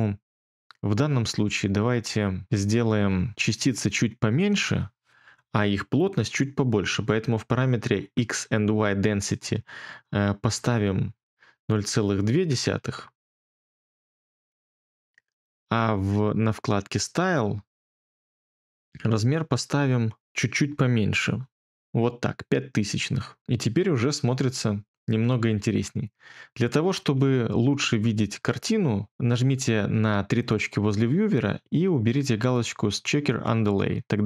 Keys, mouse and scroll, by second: 8.7-11.5 typing, 20.6-22.3 typing.